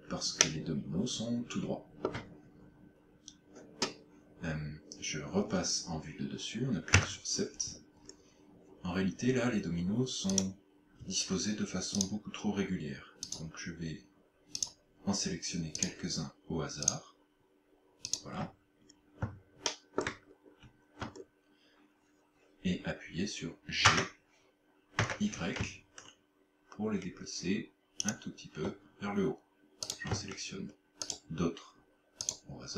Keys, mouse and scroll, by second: 0.5 shift+middle click, 7.1 KP_7, 8.0 scroll down 2, 10.4 right click, 12.0 shift+right click, 13.3 shift+right click, 14.7 shift+right click, 15.9 shift+right click, 16.9 shift+right click, 18.1 shift+right click, 18.8-19.3 scroll up 2, 19.7 shift+middle click, 20.3 scroll up 1, 21.1-21.7 scroll down 4, 23.9 g, 28.1 shift+click, 29.9 right click, 31.1 shift+right click, 32.3 shift+right click.